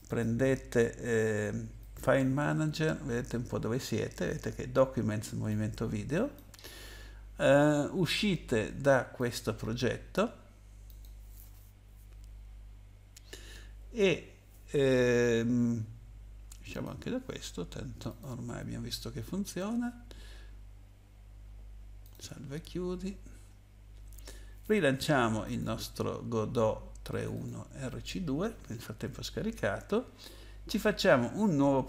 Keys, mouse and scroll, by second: 1.8 click, 5.5 click, 9.2 click, 10.9 click, 16.7 click, 18.1 click, 22.0 click, 25.4 click, 27.1 click, 27.4 double click.